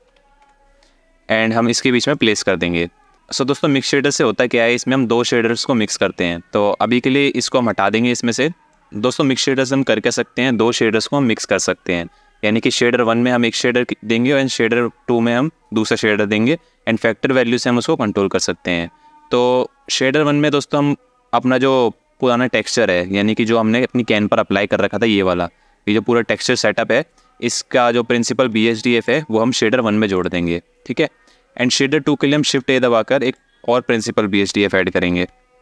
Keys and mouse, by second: 7.0-7.6 drag, 8.4-8.8 drag, 19.9-22.0 drag, 23.0 alt+shift+middle click, 23.8 ctrl+shift+click, 28.3-28.7 alt+shift+middle drag, 29.8 ctrl+shift+click, 32.1 shift+a.